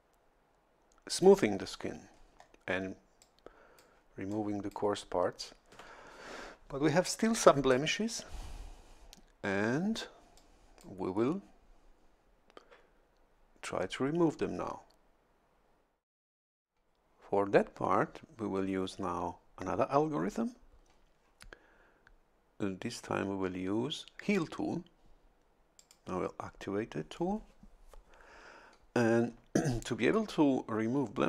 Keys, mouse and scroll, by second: 0.0-1.5 drag, 1.8-2.6 scroll up 2, 3.2 click, 4.3 click, 10.4 click, 25.8 click.